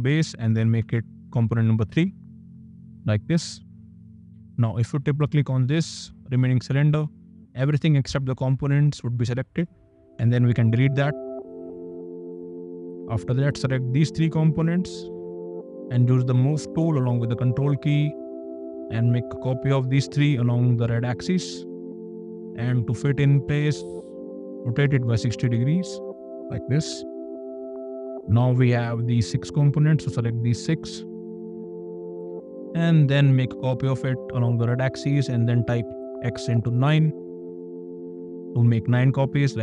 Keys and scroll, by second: 1.0 g, 10.4 d, 15.7 m, 22.5 q, 24.9 KP_0, 25.4 Return, 26.4 space, 32.1 m, 35.6 *, 35.9 KP_9, 36.5 Return.